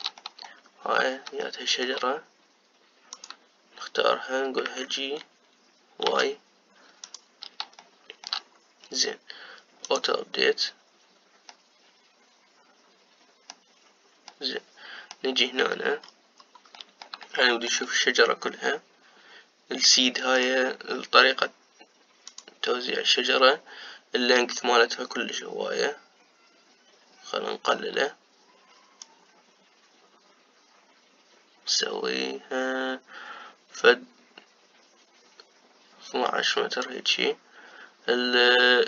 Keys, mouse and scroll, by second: 0.1-3.8 shift+middle drag, 3.8 click, 5.5 g, 8.5 shift+middle click, 9.2-10.5 scroll up 1, 10.6 click, 12.2-16.4 middle drag, 16.4 scroll up 1, 16.7-17.5 scroll down 4, 17.5-21.1 middle drag, 21.1-38.8 drag.